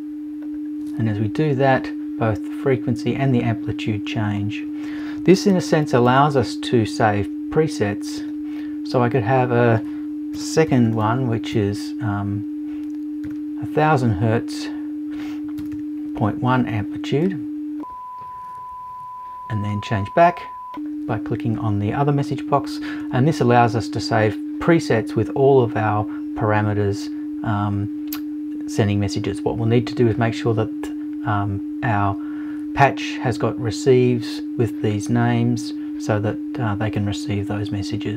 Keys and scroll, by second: 10.3 BackSpace, 11.5 BackSpace, 15.6 BackSpace.